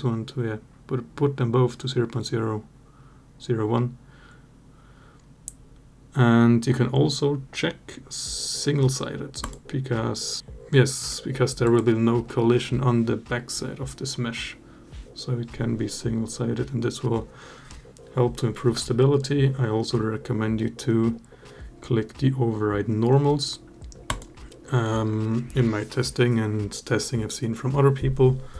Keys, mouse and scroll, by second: 9.2 click, 23.9 click.